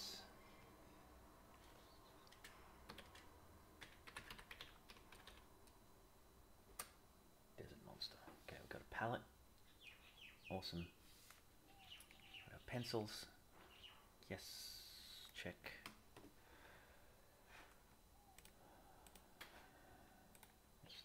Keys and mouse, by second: 12.1 click, 18.5-19.1 drag, 20.3 click.